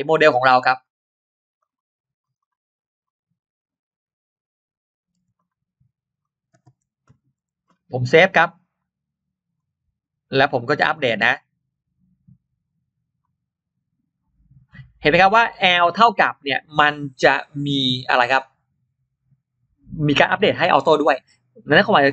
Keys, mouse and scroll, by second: 1.4 click, 2.1 click, 2.2 click, 2.9 click, 5.2 click, 5.2 m, 6.0 click, 8.6 click, 9.4 click, 10.7 click, 11.5 right click, 13.0 click, 14.9-15.6 scroll up 2, 20.7 scroll down 2.